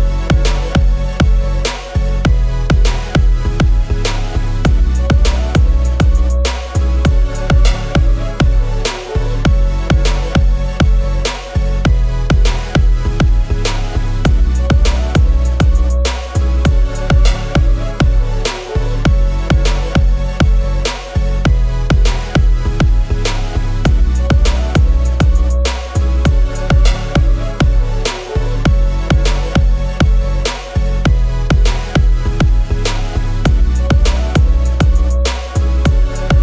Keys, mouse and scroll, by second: 12.7 double click, 23.0-24.3 scroll up 1, 31.8 double click, 33.2 shift+Down, 33.3 shift+Down.